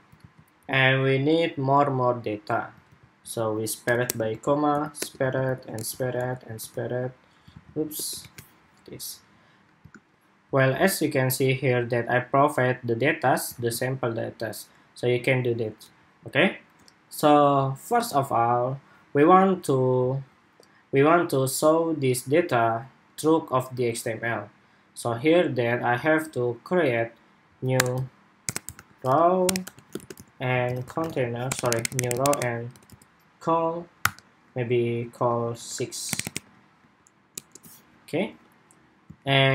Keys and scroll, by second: 0.1 super+s, 2.6 super+c, 4.1 super+v, 5.1 super+v, 5.9 super+v, 6.4 super+v, 7.4 super+z, 8.1 super+v, 9.8 shift+super+2, 13.4 super+s, 39.1 super+s.